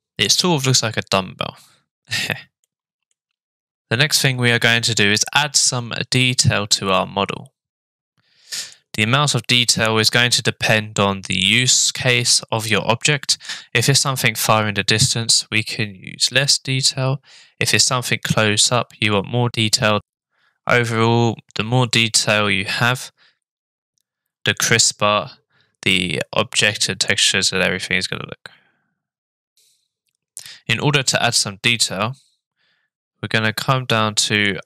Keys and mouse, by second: 2.6 middle click, 6.2-8.7 middle drag, 27.5-29.6 middle drag, 34.1 click.